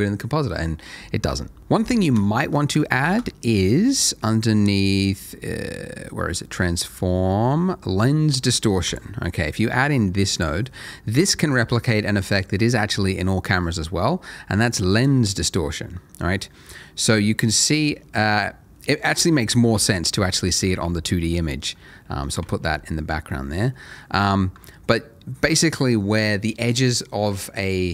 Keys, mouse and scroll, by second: 1.6 middle click, 3.0 shift+a, 8.8 click, 10.7 scroll up 1, 10.8 middle click, 14.9 click, 16.2-16.5 scroll down 1, 18.7 middle click, 19.7 v, 20.1 v, 20.8 alt+v, 21.1 alt+middle click, 21.8 alt+middle click, 22.6 v, 22.9 middle click, 23.7 middle click.